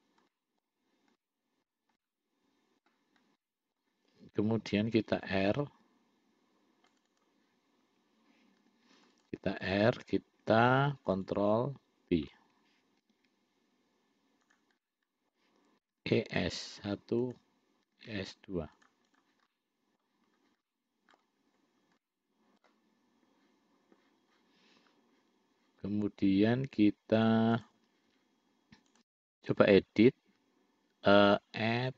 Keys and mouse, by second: 0.6 middle click, 1.5 middle click, 2.3 middle click, 3.7 middle click, 5.5 ctrl+r, 8.9 ctrl+r, 11.3 shift+click, 11.6 shift+click, 13.3 ctrl+b, 15.1 middle click, 16.2 e, 18.2 e, 19.4 click, 19.8 middle click, 20.9 middle click, 22.3 middle click, 27.6 click, 29.2 click, 31.7-31.9 drag.